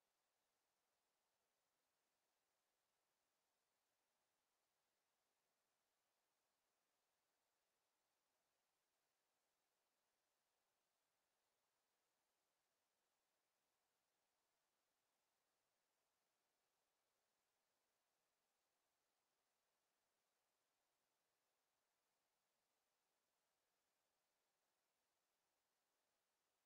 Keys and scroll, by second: 2.7 w, 9.5 Escape.